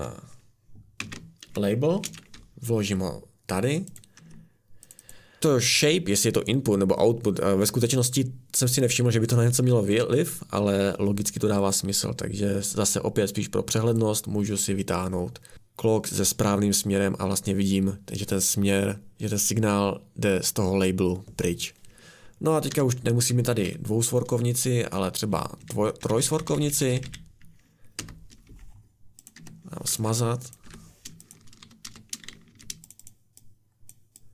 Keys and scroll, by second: 1.0 ctrl+c, 2.0 ctrl+v, 4.2 Escape, 22.7 Escape, 23.6 a, 26.0 Down, 26.2 Down, 26.5 Down, 26.6 Down, 26.9 Down, 27.0-32.9 Down, 28.0 Return, 29.4 Escape, 30.6 Delete, 31.6-32.5 typing.